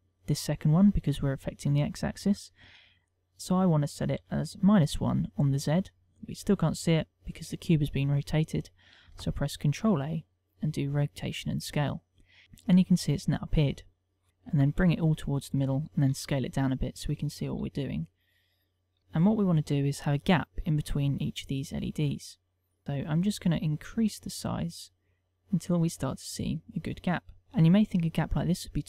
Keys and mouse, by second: 1.4 ctrl+click, 3.4 click, 9.1 ctrl+a, 14.3 ctrl+middle click, 14.3 KP_1, 14.7 g, 15.6 click, 16.2 s, 17.2 click, 17.5 s, 18.6 click, 19.0 shift+middle click, 21.2 click, 21.6 click, 23.6 click, 24.3 click, 25.7 click, 26.4 click, 27.0 ctrl+middle click, 28.7 ctrl+middle click.